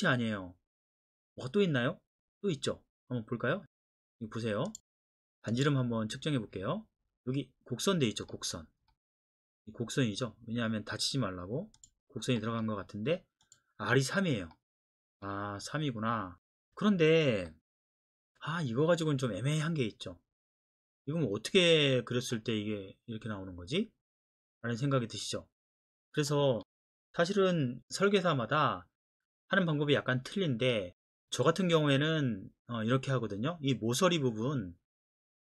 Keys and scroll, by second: 27.1 Escape.